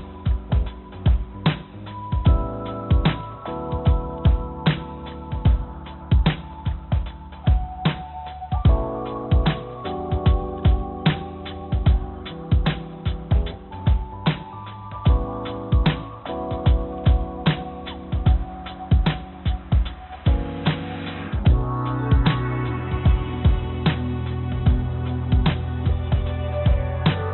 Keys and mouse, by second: 1.2 click, 2.1 click, 2.3 click, 4.0 ctrl+j, 6.8-7.1 drag, 7.2 click, 9.1 click, 10.4 shift+click, 11.4 ctrl+j, 13.4 ctrl+z, 14.7 ctrl+shift+z, 15.3 ctrl+z, 17.5 shift+click, 21.0 shift+click, 24.3 click, 25.8 shift+drag, 27.0 ctrl+j.